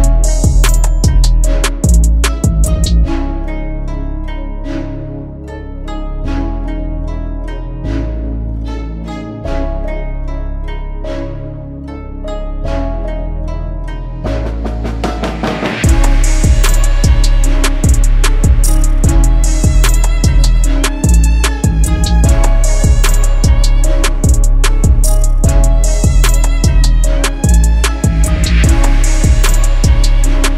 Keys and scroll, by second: 0.6 F12, 3.0 KP_2, 3.2 KP_Decimal, 18.8 KP_5, 18.8 Return, 23.4 p, 25.0 shift+F4, 28.0 F2.